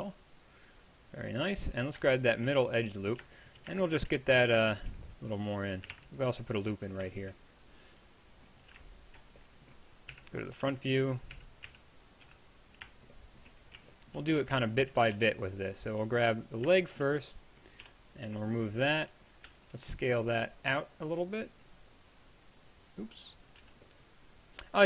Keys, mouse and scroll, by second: 5.9 ctrl+r, 10.1-12.3 typing, 15.2 b, 17.8 b, 19.5 s, 23.6 z.